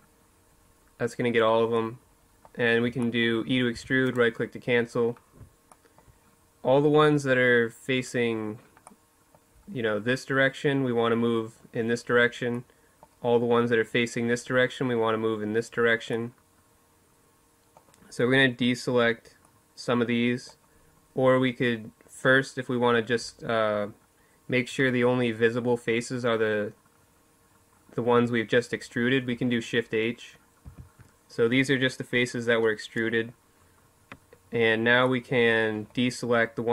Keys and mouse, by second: 2.5 e, 13.0-14.9 middle drag, 16.7-18.2 middle drag, 18.3-20.1 middle drag, 20.6-24.7 middle drag, 29.4 shift+h.